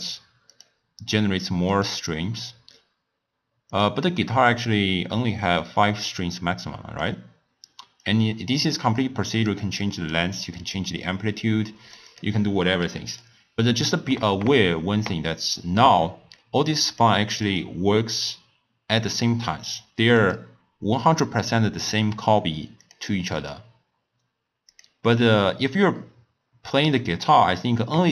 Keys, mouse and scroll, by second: 0.5-3.5 drag, 3.7-13.2 drag, 13.8-16.8 middle drag, 16.9 click, 17.4-17.8 drag, 20.2 click, 22.8 click, 23.3 click.